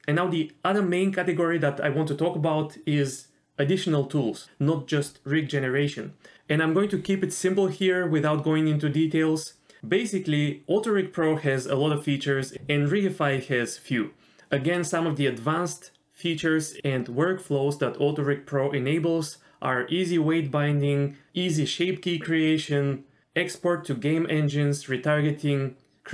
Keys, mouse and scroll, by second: 11.5 middle click, 12.0 click, 12.2 click, 12.7 click, 13.0 click, 13.2 click, 13.9 middle click, 14.3 click, 15.0 click, 15.5 click, 16.0 click, 16.6 click, 17.4 middle click, 18.0 middle click, 18.7 middle click, 24.3 middle click, 24.4 click, 25.0 middle click, 25.1 click, 25.3 click, 25.6 click, 25.7 click, 26.0 middle click.